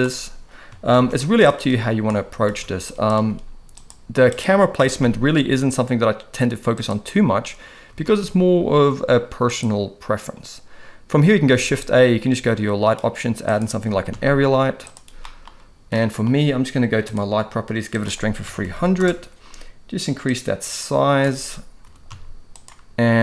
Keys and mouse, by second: 0.9 ctrl+b, 2.5 ctrl+s, 2.9 drag, 3.8-4.4 drag, 4.8 r, 8.1 ctrl+s, 9.6-10.4 drag, 11.5 shift+a, 13.9 g, 15.2 middle click, 16.0-16.3 middle drag, 18.0-19.0 drag, 18.7 0, 20.3 click, 21.8 g.